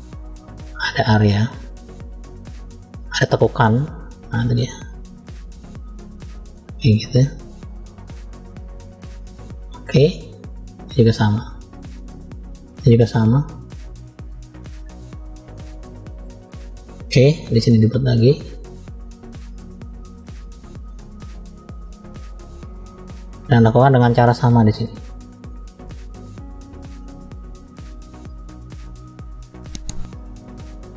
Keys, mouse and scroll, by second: 1.3 middle click, 2.9 click, 4.3 middle click, 5.3 click, 6.9 click, 7.6 click, 8.6 middle click, 9.5 click, 10.8 click, 12.0-13.1 middle drag, 15.3-16.6 middle drag, 17.2 middle click, 18.4 click, 20.0 middle click, 21.1 click, 22.8-24.1 middle drag, 24.7 click, 27.1 middle click, 28.3 click, 29.0 middle click, 29.7 click, 30.6 click.